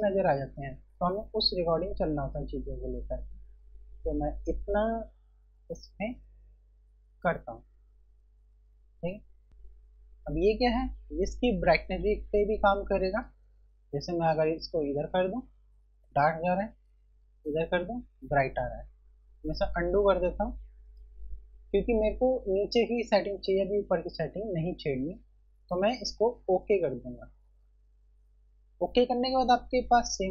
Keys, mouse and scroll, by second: 2.0 click, 9.4 z, 14.3 click, 19.4 ctrl+z, 21.0 click, 26.8 click.